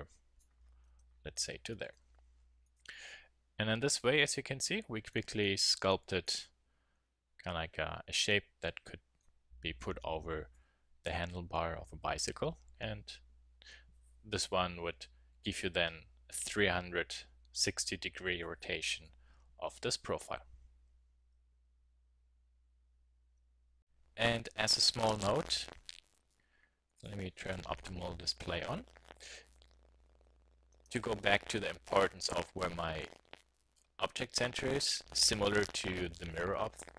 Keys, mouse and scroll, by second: 0.4 click, 0.9 Tab, 2.0 z, 10.5 KP_1, 25.4 z, 29.4 a, 30.1 a, 30.7 Tab, 31.4 a, 31.9 a.